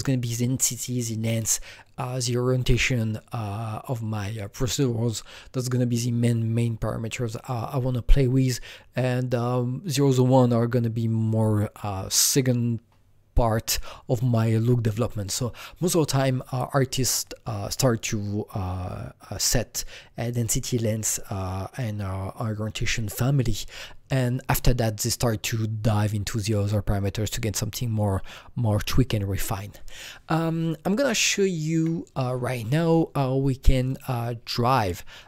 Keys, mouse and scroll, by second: 31.6 Escape, 33.7 click, 35.1 click.